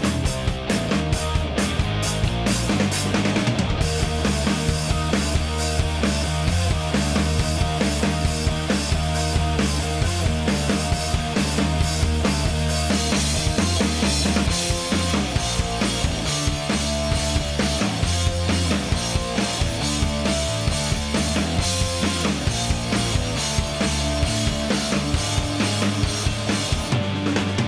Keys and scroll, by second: 2.0 Escape, 8.3 F1, 15.3 Escape, 19.1 1, 19.3 0, 19.7 Return, 21.5 F1, 24.1 Escape.